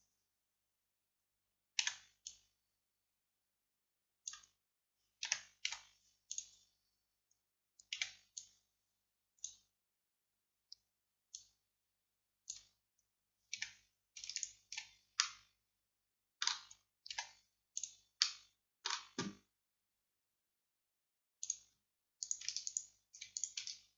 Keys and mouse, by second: 1.9 c, 5.8 x, 8.0 c, 14.4-15.4 drag, 15.4-17.2 middle drag, 17.2 x, 18.3 middle click, 21.5 click, 23.2-23.9 right drag.